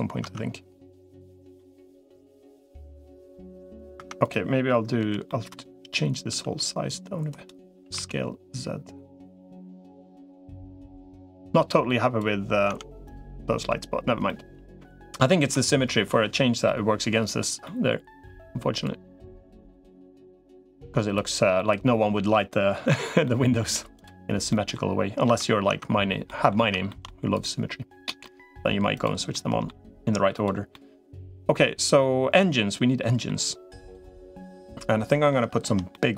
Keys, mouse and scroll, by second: 0.0 Tab, 1.3-2.8 middle drag, 3.8 Tab, 4.8 l, 5.1 middle click, 6.2 s, 7.6 s, 11.2 click, 12.6 Tab, 13.2 middle click, 14.0 middle click, 15.2 Tab, 16.5 middle click, 17.4-18.6 middle drag, 19.4 click, 20.2 click, 21.4 middle click, 23.0 middle click, 24.3 middle click, 25.0 Tab, 25.6 Tab, 26.0 middle click, 26.7 shift+middle click, 28.0 middle click, 29.1 middle click, 30.5-33.1 middle drag, 33.9-35.1 middle drag, 35.7 middle click.